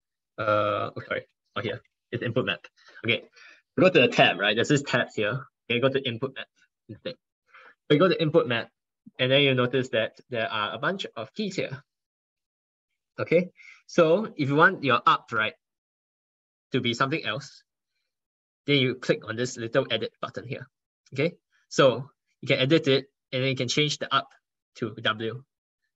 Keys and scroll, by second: 4.9 ctrl+1, 5.3 ctrl+1, 6.8 ctrl+1.